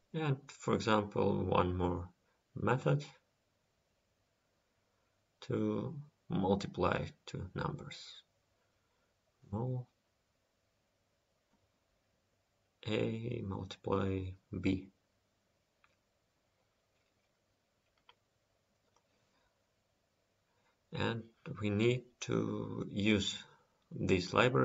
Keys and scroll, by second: 3.8 ctrl+c, 16.5 ctrl+s.